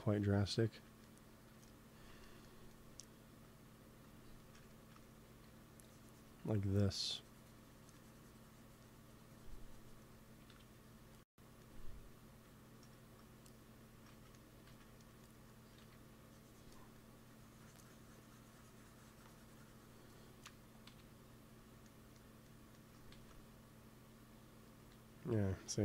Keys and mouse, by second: 0.4-1.5 middle drag, 3.6-4.8 drag, 5.2 f, 6.6-8.4 drag, 10.4 KP_1, 14.0 ctrl+z, 14.6 ctrl+z, 15.7 f, 16.9-18.9 drag, 20.8 KP_1, 21.7-23.0 middle drag, 23.0 ctrl+s.